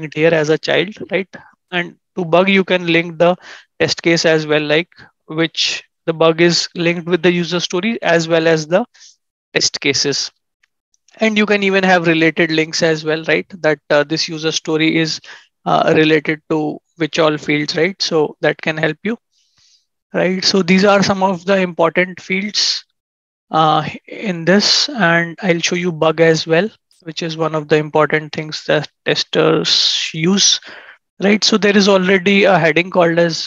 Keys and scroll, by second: 15.1 ctrl+shift+7, 17.7 ctrl+shift+5, 18.2 ctrl+shift+2.